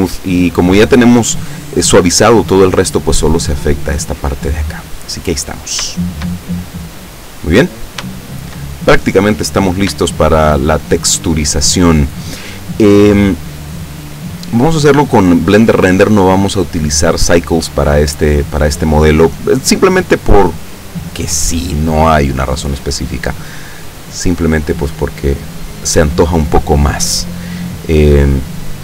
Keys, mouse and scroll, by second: 4.6-5.7 middle drag, 5.7-6.2 scroll down 1, 6.2-7.8 shift+middle drag, 7.8-8.2 scroll up 1, 8.3-8.8 shift+middle drag, 8.8-9.4 shift+middle drag, 10.0-10.8 shift+middle drag, 18.3 scroll down 1, 25.2-26.1 middle drag.